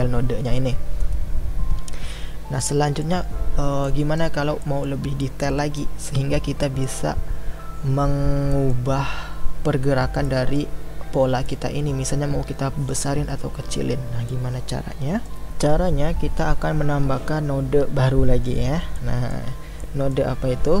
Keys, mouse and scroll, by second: 2.7-20.8 middle drag.